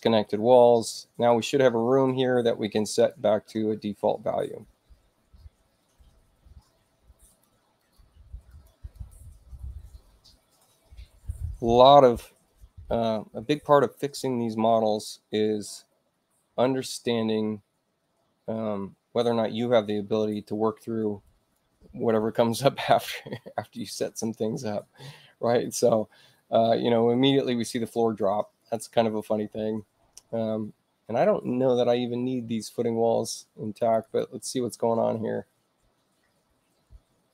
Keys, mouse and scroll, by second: 1.2 click, 2.9 click, 7.2 click, 7.7 click, 8.4 click, 8.8 click, 21.1 click, 28.5 click, 33.7 click, 33.9 click.